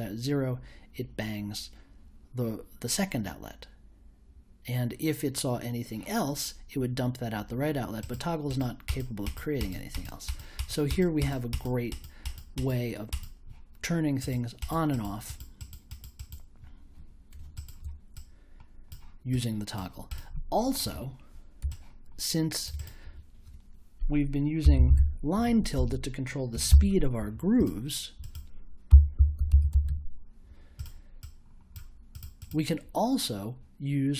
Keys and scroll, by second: 24.4-27.2 typing, 28.6-30.3 typing.